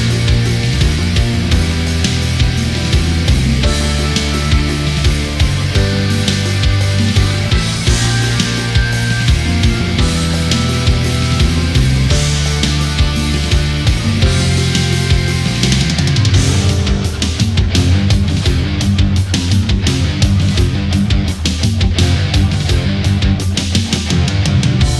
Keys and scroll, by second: 3.9 ctrl+=, 7.7 space, 13.1 ctrl+z, 20.6 space, 21.3 ctrl+-, 21.9 space, 23.9 ctrl+=, 24.8 space.